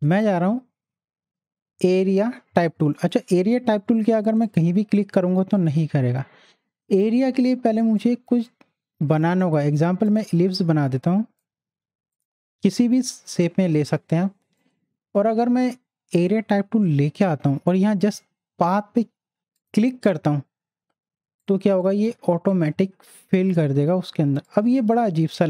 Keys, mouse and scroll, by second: 3.0 click, 7.8 right click, 9.2-14.6 drag, 14.6 right click, 16.2 click, 19.6 click, 22.1 z, 22.5-24.4 drag, 24.7 space, 24.9 click, 25.2 space.